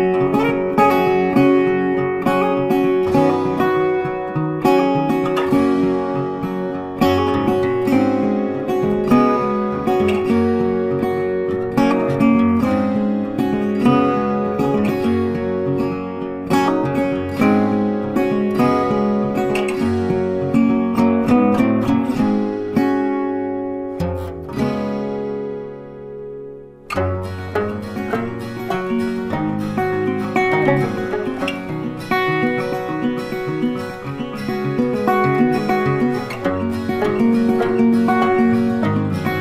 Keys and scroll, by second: 4.7 ctrl+t, 25.6 Delete, 28.3 ctrl+d, 35.0 Delete, 36.8 ctrl+d.